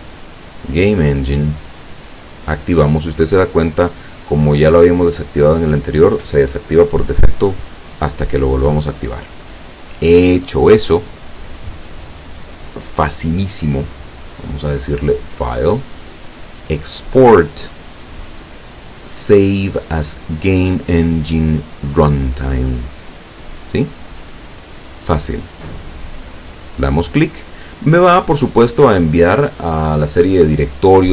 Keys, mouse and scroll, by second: 0.7 click, 2.2 click, 9.0 click, 14.9 click, 26.3 click.